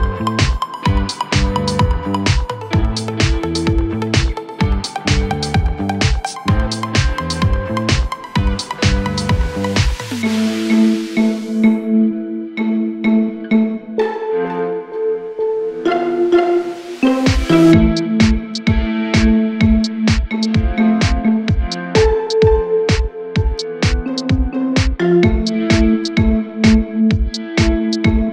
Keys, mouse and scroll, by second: 0.2 scroll down 1, 0.5-1.4 scroll up 3, 2.5 Escape, 3.8 scroll up 1, 4.7 scroll down 3, 5.1 space, 6.1 scroll down 1, 6.3 shift+middle click, 6.7 shift+scroll up 2, 7.3-7.7 scroll down 1, 7.7 middle click, 8.0 scroll down 2, 8.1 middle click, 10.7 scroll up 5, 11.2 double click, 11.8-13.7 typing, 13.7-14.3 scroll down 17, 14.5 middle click, 14.9 middle click, 15.1-15.8 scroll up 12, 15.8 space, 16.4 m, 17.4-18.3 typing, 18.3-18.6 scroll down 9, 18.6 middle click, 18.8 middle click, 19.1 middle click, 19.3 scroll up 1, 19.6 space, 20.6 middle click, 20.9 scroll up 10, 21.2 scroll down 3, 21.7 typing, 22.2 double click, 22.4 scroll down 3, 23.0 r, 24.9-25.6 typing, 27.7 scroll up 2, 27.8-28.3 typing, 28.2 double click.